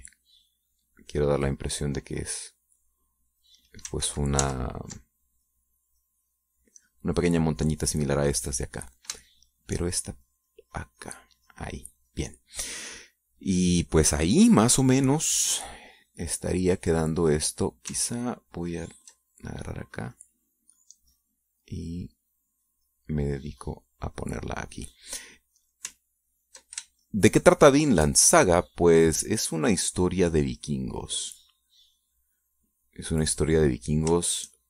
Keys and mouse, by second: 5.4 ctrl+z, 6.5-8.3 ctrl+drag, 10.5 shift+click, 11.3-13.1 shift+drag, 13.4-14.8 middle drag, 14.8-16.5 drag, 20.2 ctrl+click, 21.1-25.7 drag, 27.8 ctrl+click, 28.4-29.5 ctrl+shift+drag, 29.9-34.6 shift+drag.